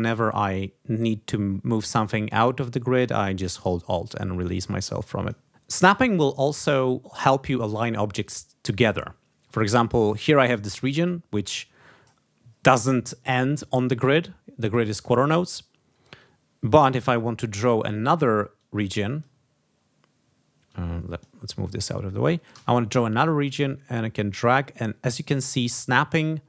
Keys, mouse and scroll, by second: 0.0-1.3 drag, 2.0-5.4 drag, 17.9 ctrl+scroll down 2, 18.5 ctrl+click, 19.5 ctrl+scroll down 2, 20.6 click, 21.5-22.0 ctrl+scroll up 2, 22.5 ctrl+d, 23.2-26.4 drag.